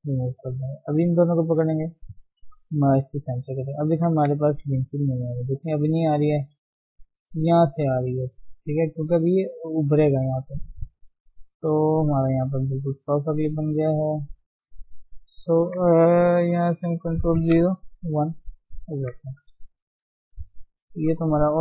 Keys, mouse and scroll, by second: 0.1 shift+middle click, 0.5-0.9 scroll up 2, 0.9 click, 1.4 shift+click, 2.8 m, 3.2 Tab, 3.5-4.1 scroll down 5, 4.2 ctrl+1, 4.7 scroll down 3, 4.9-6.9 middle drag, 6.9 scroll up 1, 7.6 Tab, 9.1-13.1 middle drag, 13.1 Tab, 13.3 middle click, 13.6 Tab, 14.0-15.6 middle drag, 15.6 Tab, 17.2 ctrl+0, 18.2 KP_1, 18.7-19.6 scroll up 2, 18.9 Tab, 19.6 shift+middle click, 19.9 scroll up 1, 20.9 click.